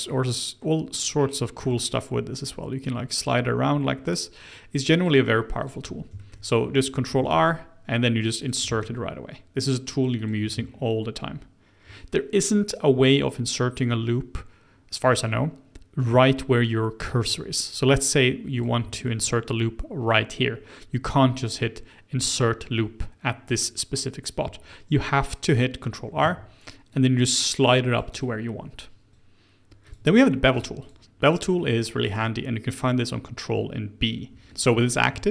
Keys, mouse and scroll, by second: 0.9-3.9 drag, 5.5 click, 6.1-7.2 shift+middle drag, 7.2 ctrl+r, 8.6 ctrl+r, 10.5 ctrl+r, 18.8 shift+middle click, 19.2-20.9 scroll up 1, 20.9-22.2 scroll up 1, 26.1 ctrl+r, 29.1 click, 29.8 click, 30.2 scroll down 2, 30.5 Tab, 30.7 click, 31.1-31.5 scroll up 2, 31.5-34.2 middle drag, 34.2 Tab, 34.5 scroll up 2.